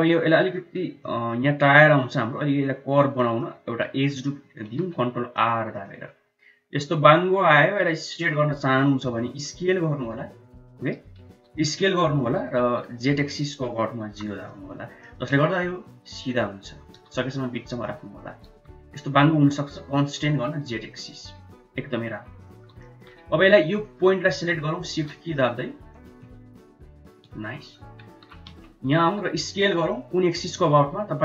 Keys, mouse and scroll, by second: 0.2 middle click, 0.9-1.2 shift+middle drag, 3.0 middle click, 3.5 Tab, 4.5 ctrl+r, 9.1 s, 11.2 s, 14.8 middle click, 16.8 g, 18.4 g, 22.3 middle click, 22.6 shift+middle click, 23.7 click, 24.9 middle click, 25.9 shift+click, 26.5 shift+click, 27.4 middle click, 28.1 KP_1, 28.4 KP_3, 29.3 s.